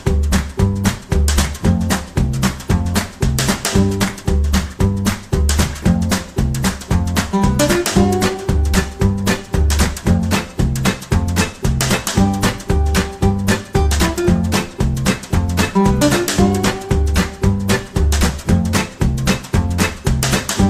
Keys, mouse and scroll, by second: 13.3 click.